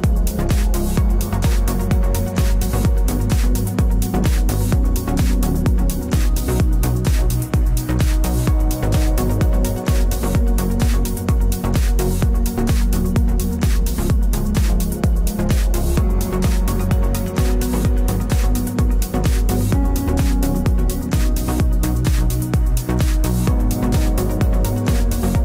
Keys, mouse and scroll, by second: 0.4 middle click, 0.6-2.1 right drag, 1.3 click, 3.1 right click, 4.2 click, 5.5 ctrl+r, 7.7 b, 8.1 g, 10.7-12.6 right drag, 10.9 b, 11.8 click, 13.3 ctrl+r, 15.2 click, 15.6 g, 17.7 middle click, 18.5-20.1 right drag, 19.1 KP_Decimal, 20.1 click, 20.1 b, 20.3 right click, 20.5 g, 22.9 right click, 24.0 g.